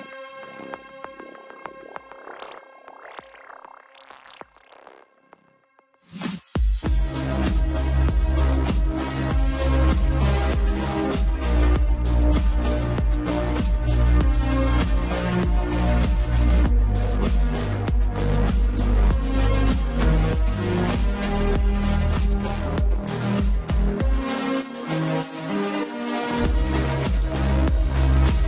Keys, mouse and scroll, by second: 5.7 scroll up 1, 6.7-9.0 shift+middle drag, 9.0 Tab, 18.1-18.9 scroll up 1, 18.9 ctrl+z, 20.6 s, 23.8 s, 25.9 Tab, 26.5 e.